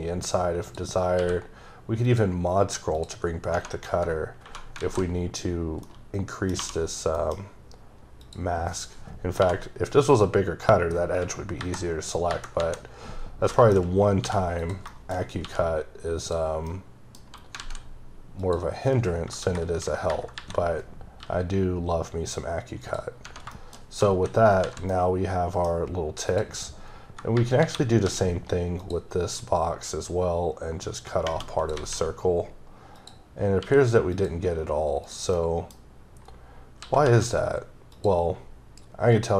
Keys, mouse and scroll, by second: 0.5 scroll down 1, 0.6 click, 1.2 q, 2.1 click, 3.0 click, 3.3 scroll up 2, 3.5 Right, 5.8 middle click, 6.6 2, 7.2 middle click, 7.3-7.6 scroll up 2, 8.2 click, 9.3 2, 10.1 click, 13.2 scroll down 3, 13.5 shift+middle click, 13.8-14.2 scroll up 2, 14.2 g, 14.6 click, 14.9 shift+middle click, 15.4 g, 16.2 click, 16.5 scroll down 2, 16.7 middle click, 16.8-17.5 scroll up 2, 17.6 alt+z, 18.4 click, 20.3 KP_7, 21.2 g, 22.8 click, 23.1 scroll down 3, 23.5 middle click, 23.9 scroll up 2, 24.1 h, 24.4 scroll down 2, 24.6 alt+z, 24.9 middle click, 25.7-26.3 scroll up 2, 26.3 click, 27.6 KP_7, 28.0 d, 28.8 click, 29.4 click, 33.0 click, 33.6 q, 34.1 click, 35.0 click, 35.4 middle click, 35.8 scroll up 2, 36.8 s, 37.9 typing, 37.9 click, 39.1 click.